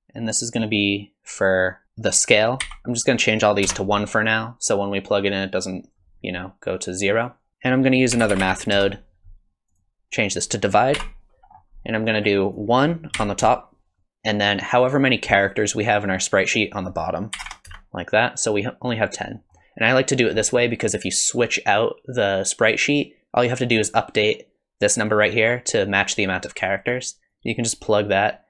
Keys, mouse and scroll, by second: 1.6 click, 5.1 click, 6.9 click, 7.5 BackSpace, 10.4 click, 11.5-12.5 scroll up 3, 12.5 click, 15.9 middle click, 16.7 click, 19.4 middle click, 20.4 middle click, 27.3 click.